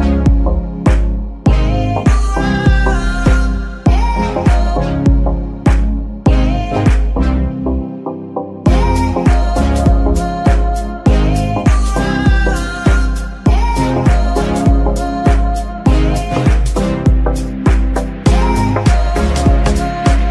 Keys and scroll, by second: 0.7 g, 1.2 Escape, 1.8 g, 2.6 Escape, 3.3 a, 3.5 g, 3.9 Escape, 4.3 s, 4.4 x, 5.3 Escape, 5.7 Tab, 6.0 Tab, 6.6 g, 7.1 Escape, 7.6 g, 8.2 Escape, 12.0 shift+g, 13.0 Escape, 13.9 Tab, 19.9 shift+a.